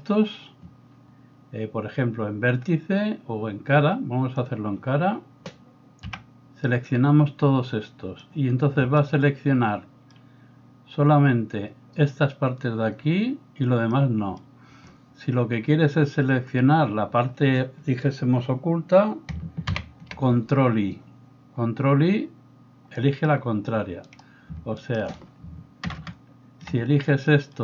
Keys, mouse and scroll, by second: 6.1 b, 19.7 ctrl+i, 24.1 middle click, 24.1 right click, 24.8 shift+right click, 25.8 ctrl+KP_6, 26.0 ctrl+KP_Add.